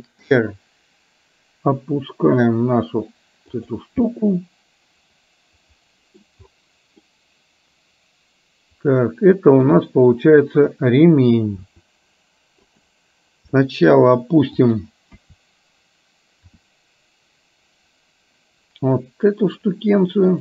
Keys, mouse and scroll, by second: 4.2-6.4 middle drag, 7.1-9.7 middle drag, 11.7 r, 13.6 middle click, 14.7 click, 16.1 KP_1, 16.6 r.